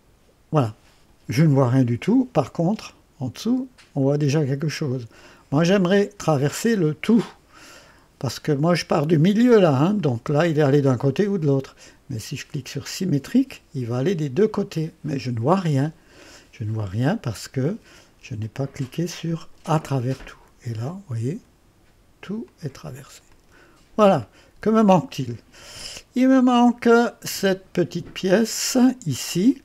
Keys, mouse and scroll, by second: 0.3 click, 2.4-5.8 drag, 6.8-8.8 drag, 10.0 click, 12.9 click, 14.1-16.4 drag, 18.4 click, 18.9-21.5 drag, 22.5 click, 23.4 click, 24.3 click, 26.6 click.